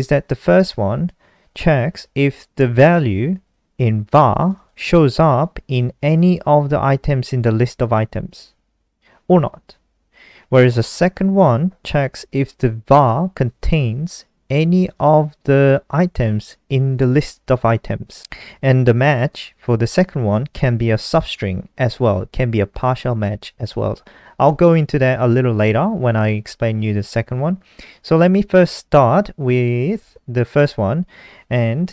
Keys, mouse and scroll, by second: 4.5 click, 14.7 click, 14.9 click, 18.5 click.